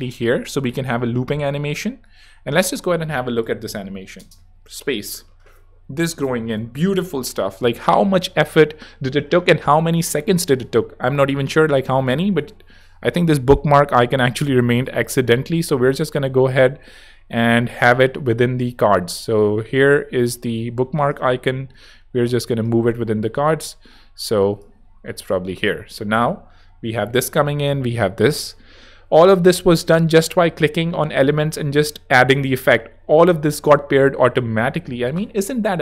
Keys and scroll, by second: 2.6 space, 4.2 space, 25.3 space.